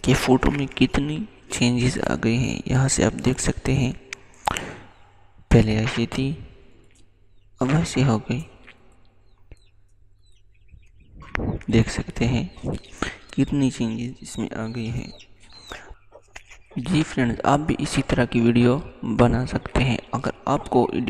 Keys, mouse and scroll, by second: 3.3 click, 13.1 click, 13.3 click.